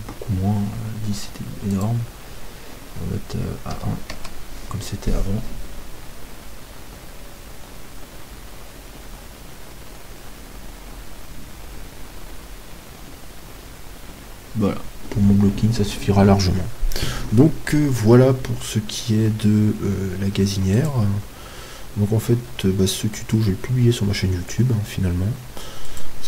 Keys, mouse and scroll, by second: 0.4-4.0 drag, 20.9-22.8 drag.